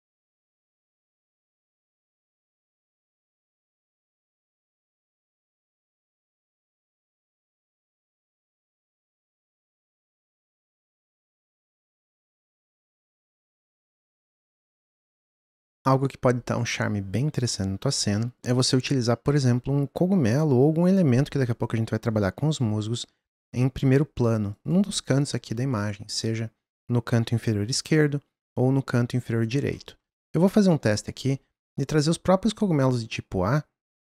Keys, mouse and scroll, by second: 0.1 click, 0.4 click, 0.7 click, 1.3 click, 1.4 s, 1.8 g, 3.7 g, 3.9 s, 4.2 g, 5.2 middle click, 5.9 click, 6.2 click, 6.3 g, 7.3 click, 7.8 g, 10.9 click, 11.2 drag, 11.3 click, 11.9 click, 14.4 click, 17.6-19.5 middle drag, 19.5 g, 29.8-31.4 middle drag, 31.4 g, 32.6 g.